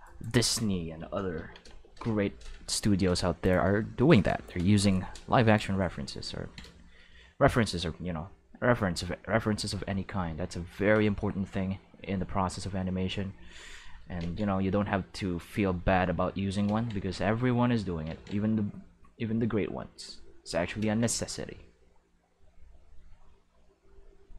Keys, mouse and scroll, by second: 0.0 right click, 1.3 ctrl+l, 1.7 x, 1.9 Return, 2.8 ctrl+Tab, 3.4 click, 3.8 shift+middle click, 6.4 ctrl+Tab, 8.6-9.7 drag, 10.2 click, 12.0 click, 13.1 click, 14.2 ctrl+z, 14.9-16.3 drag, 16.6 ctrl+z, 17.4 click, 18.1 ctrl+z, 18.8-20.3 drag, 20.8 ctrl+z, 21.5-23.1 drag, 24.0-24.3 drag.